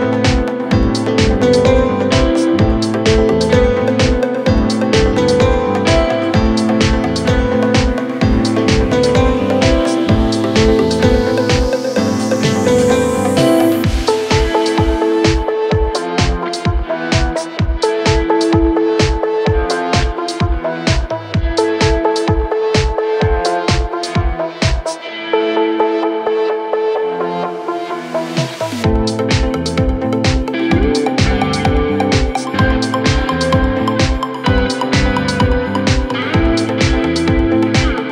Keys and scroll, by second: 0.2 ctrl+z, 2.5 ], 4.8 ctrl+d, 5.0 Escape, 6.6 4, 9.0 3, 13.7 4, 17.9 m, 18.4 Return, 22.1 3.